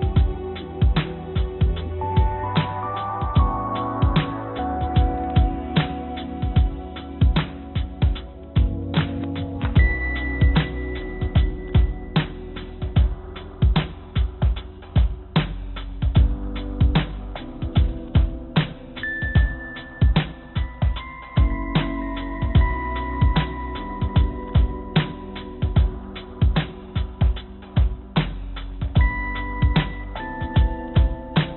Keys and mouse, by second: 0.0-3.4 drag, 4.2 click, 4.7 click, 6.9 click, 7.8-8.2 drag, 8.8-9.8 drag, 11.5-12.9 drag, 14.1-16.8 drag, 17.9 click, 18.0 click, 18.8-19.9 drag, 21.9 click, 23.0 g, 25.6-26.9 drag, 27.3 s, 29.5 g.